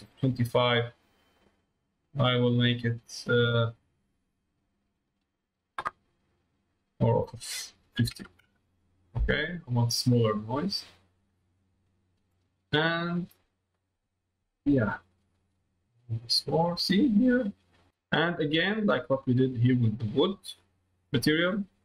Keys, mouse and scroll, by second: 4.5 middle click, 7.0-9.3 drag, 12.8-14.8 drag, 15.4-17.2 drag, 17.7 click, 17.9 middle click, 18.7 middle click, 19.3 middle click, 20.3 middle click, 21.7 middle click.